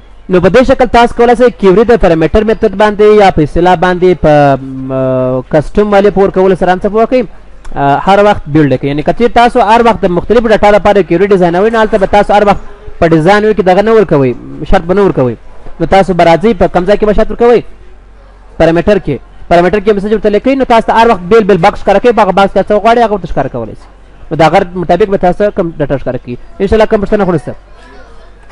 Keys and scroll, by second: 28.0 F10.